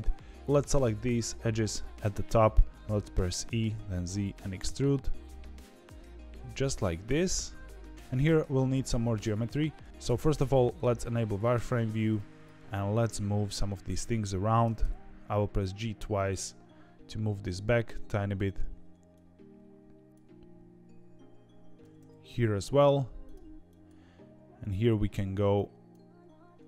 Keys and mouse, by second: 0.4 click, 1.0 ctrl+click, 3.3 e, 10.1 z, 11.7 1, 14.6 g, 19.1 click, 21.8 g, 23.6 click.